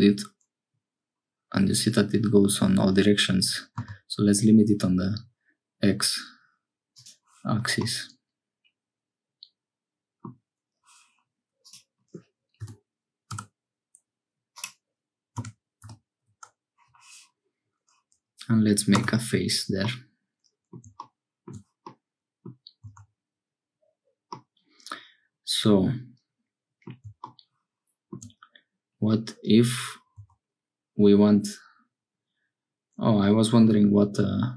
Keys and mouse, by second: 7.8-10.3 drag, 11.6-16.8 drag, 19.8 middle click, 21.9 middle click, 22.9 Tab, 24.4-26.9 middle drag, 30.2 Tab.